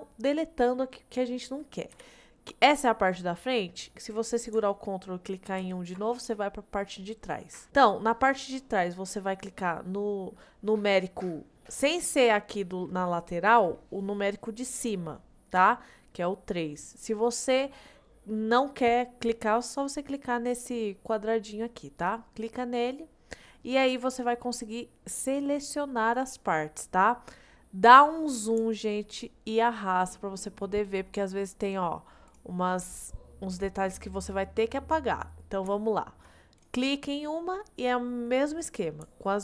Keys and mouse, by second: 2.0 KP_1, 5.6 ctrl+KP_1, 15.6 3, 25.3 click, 28.8 shift+middle click, 29.6 shift+middle click, 30.5 shift+middle click, 31.7 click, 32.3 click, 35.9 shift+middle click.